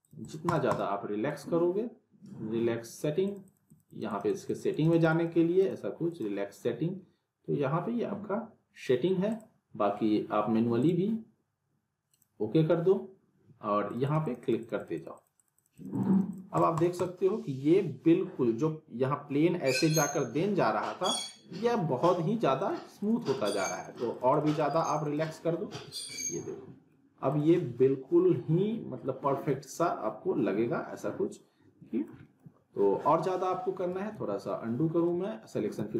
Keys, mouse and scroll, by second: 9.3 click, 22.6 click, 25.7 z, 26.1-27.1 alt+middle click, 27.3 click, 27.5 scroll up 1, 27.8-29.6 alt+middle drag, 33.3 scroll down 1, 33.5 alt+middle click, 34.1 z, 34.9 scroll up 1, 35.2-35.8 alt+middle click, 35.8 z.